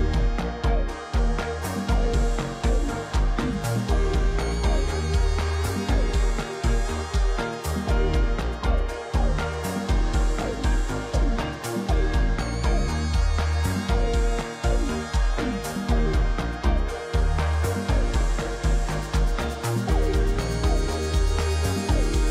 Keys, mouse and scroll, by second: 0.7 shift+click, 10.2-10.8 scroll up 2, 12.2 ctrl+alt+shift+e.